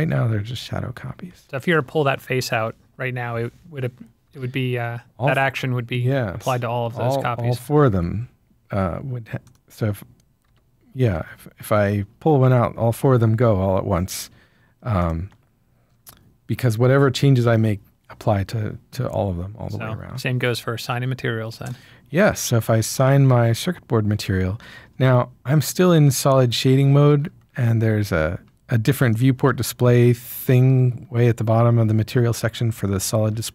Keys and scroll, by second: 4.3 g, 7.9 Escape, 10.4 g, 12.4 Escape.